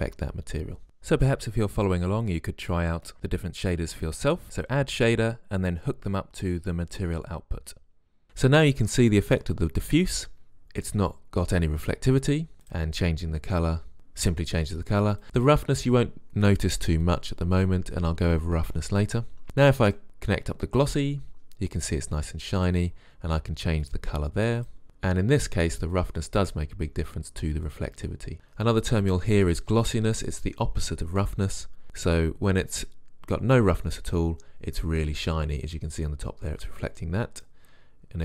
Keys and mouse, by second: 14.0-15.3 drag, 16.9 click, 26.1 click.